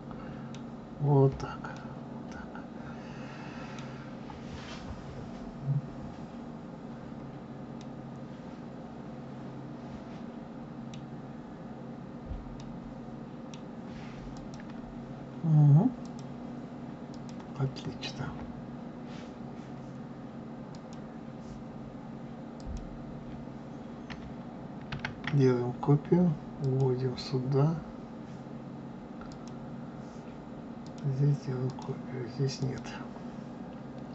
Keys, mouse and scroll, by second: 0.7 scroll down 2, 1.7-4.7 middle drag, 6.4-6.8 scroll down 1, 6.8-7.4 scroll up 4, 7.8-10.8 middle drag, 11.1-11.6 scroll down 1, 12.5-14.2 middle drag, 14.2 click, 16.0 click, 17.1 click, 20.6 click, 22.5 click, 24.9 shift+d, 29.2 click, 30.8 click, 31.6 click, 32.5 click.